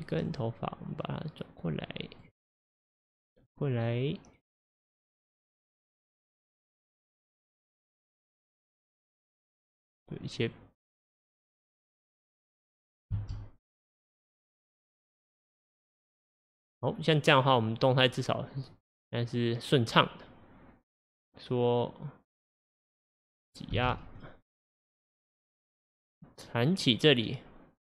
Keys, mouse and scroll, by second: 0.2 click, 1.2 click, 3.9 click, 5.7 click, 8.0 click, 9.8 click, 10.6 click, 12.4-13.2 middle drag, 13.2 space, 23.8 space, 24.3-27.3 drag.